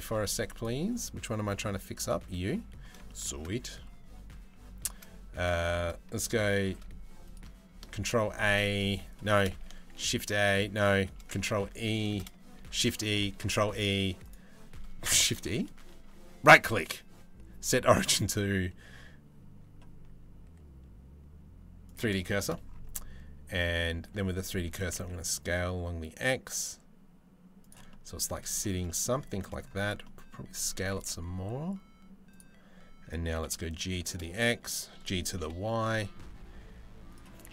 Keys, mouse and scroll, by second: 0.2 click, 6.3 shift+s, 7.4 ctrl+a, 9.5 shift+s, 12.4 shift+e, 13.1 shift+e, 14.9 shift+e, 16.3-21.6 drag, 21.9 shift+middle click, 24.3 s, 27.5-27.9 middle drag, 28.2 shift+middle click, 28.5 middle click, 28.9 shift+middle drag, 29.6-29.9 middle drag, 30.3 s, 32.9 g, 37.1 g.